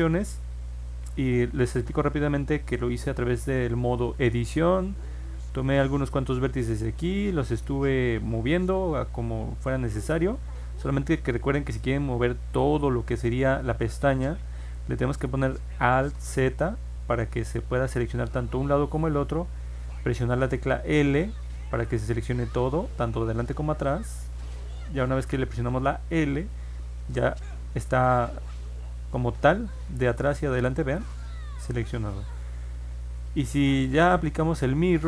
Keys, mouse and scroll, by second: 1.4 ctrl+Tab, 2.6 middle click, 2.8 middle click, 4.3 click, 5.5 click, 10.2 click, 10.6 ctrl+z, 16.1 alt+z, 20.8 l, 28.4-32.0 drag, 33.7 scroll down 1, 34.7-35.0 drag.